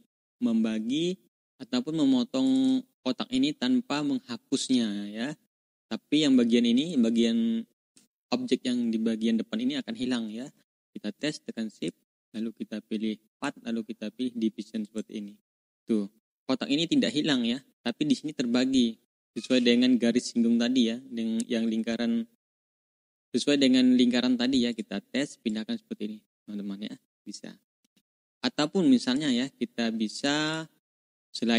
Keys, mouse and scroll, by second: 0.3-0.8 ctrl+scroll down 2, 0.8 ctrl+scroll up 1, 2.4 ctrl+click, 2.8 ctrl+scroll up 2, 5.6 ctrl+scroll down 1, 6.7 click, 11.7 shift+click, 13.2 click, 14.8 click, 15.5 click, 16.0 ctrl+scroll down 2, 24.6 click, 25.4-27.8 drag, 27.8 ctrl+z, 28.4 ctrl+scroll up 2, 29.0 click, 30.1 click, 30.4 click, 30.9-31.5 drag.